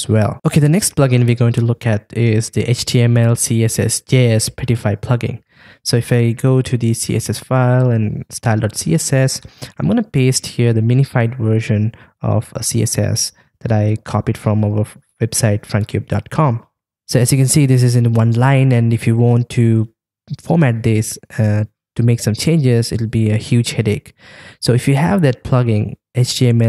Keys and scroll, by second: 11.0 super+v, 13.6 super+s.